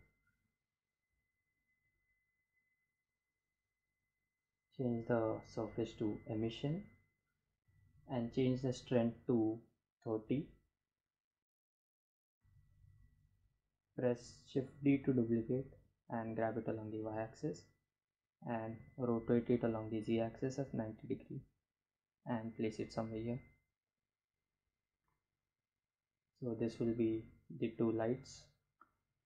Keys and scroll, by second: 8.2 3, 8.3 0, 10.6 Return, 12.9 shift+d, 15.3 y, 16.8 r, 17.5 z, 17.8 9, 18.2 0, 18.7 Return, 19.3 g, 19.5 x.